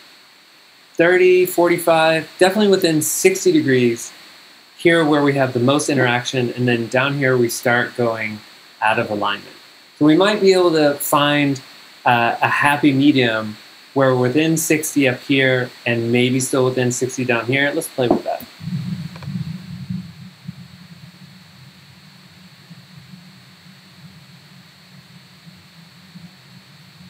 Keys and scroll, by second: 18.4 g, 20.8-22.5 typing, 22.6 Return.